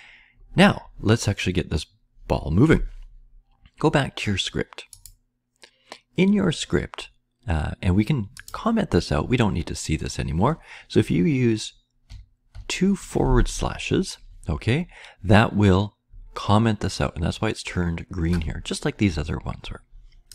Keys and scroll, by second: 12.0 /, 12.5 /.